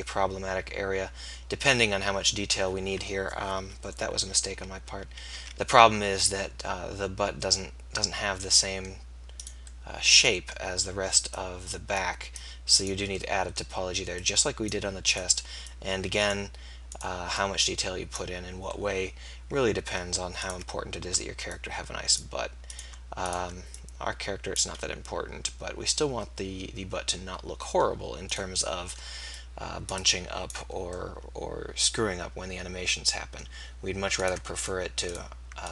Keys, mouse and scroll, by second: 3.6 ctrl+z, 3.8 ctrl+z, 4.2 ctrl+z, 4.8 ctrl+z, 5.4 ctrl+z, 7.5 middle click, 11.4-12.8 drag, 24.9-30.2 middle drag, 30.2-34.4 drag.